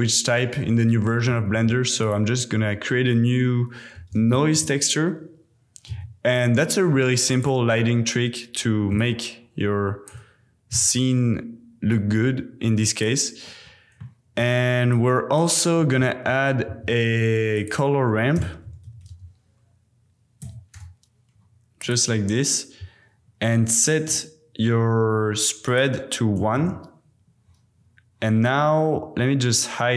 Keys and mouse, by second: 1.5 shift+a, 9.0 alt+click, 10.7 x, 12.1-13.0 drag, 14.0 click, 14.9 click, 15.8 click, 16.6 shift+a, 25.7 click.